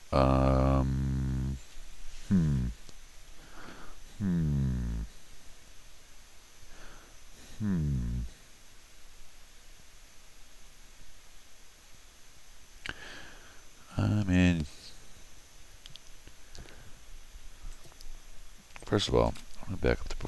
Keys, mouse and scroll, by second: 17.7 click.